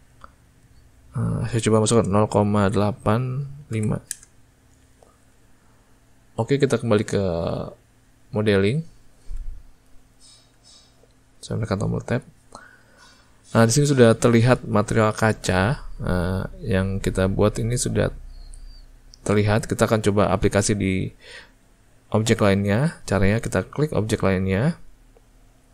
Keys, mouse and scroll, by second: 8.7 click, 10.5 Tab, 24.0 click.